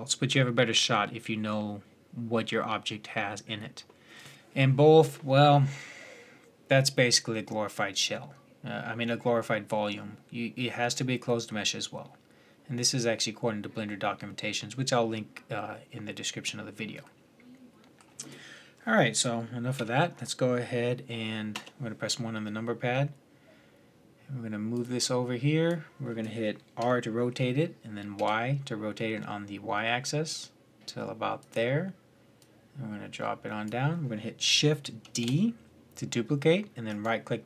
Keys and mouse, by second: 19.5-21.7 middle drag, 19.5 z, 21.3 KP_1, 24.5-26.2 drag, 26.6 r, 32.1-34.0 drag, 34.8 shift+d.